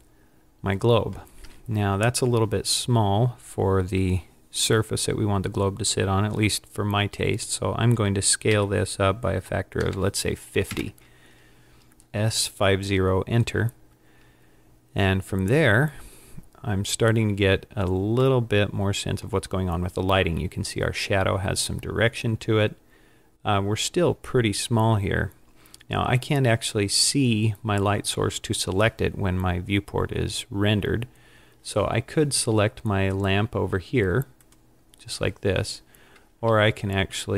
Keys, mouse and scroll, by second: 8.5 s, 18.5 middle click, 23.3 scroll down 2, 34.5 click, 36.6 z, 37.0 z.